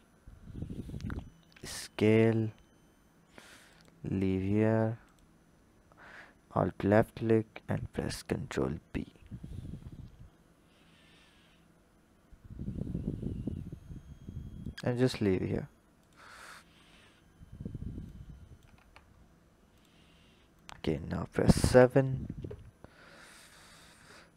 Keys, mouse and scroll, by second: 1.5 s, 5.0 alt+click, 7.6 ctrl+b, 16.0 click, 16.4-17.5 scroll down 7, 18.1 click, 18.8 Tab, 19.2-19.7 scroll down 5, 19.7 drag, 20.5 click, 21.5 KP_7, 23.2-24.3 drag.